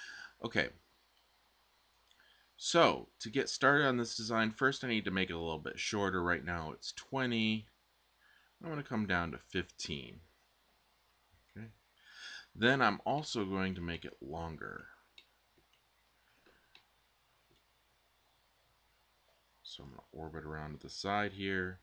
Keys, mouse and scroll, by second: 1.9 super+Tab, 20.3 click.